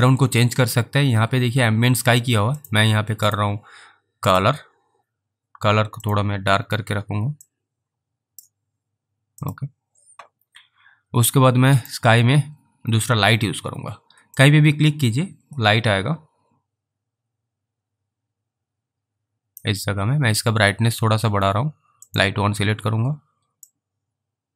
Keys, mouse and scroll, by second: 2.6 click, 7.7 click, 9.5 click, 14.7 click, 22.2 click, 24.0 click.